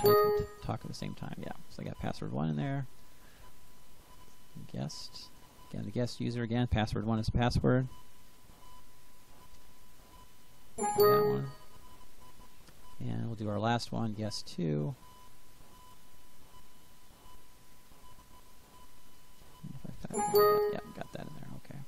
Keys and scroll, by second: 0.1 Return, 7.0-9.9 typing, 16.5-19.8 typing, 20.0 Return.